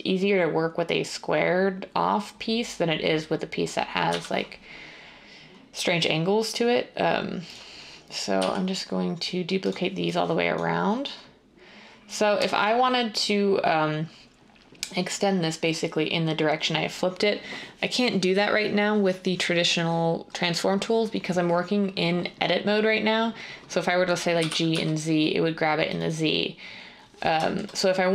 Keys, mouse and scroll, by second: 4.0 r, 7.4 r, 8.3 g, 9.6 g, 24.3-24.6 typing.